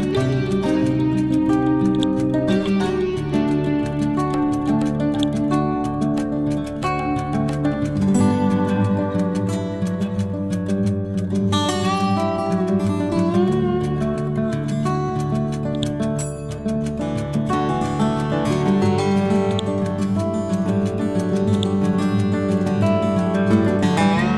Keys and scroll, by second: 6.5 F12, 7.5 5, 7.7 Return, 8.7 F12, 9.2 2, 9.5 Return, 11.9 F12, 13.2 shift+Left, 13.5 1, 13.9 5, 14.2 Return, 22.5 F12, 23.0 1, 23.4 5, 23.7 Return.